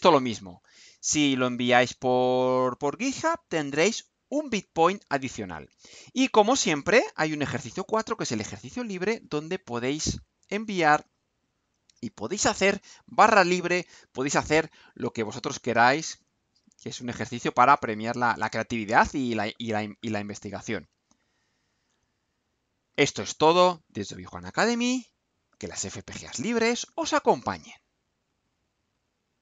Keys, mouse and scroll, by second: 6.3 click, 7.2-7.8 scroll down 2, 28.2 click, 29.3 click.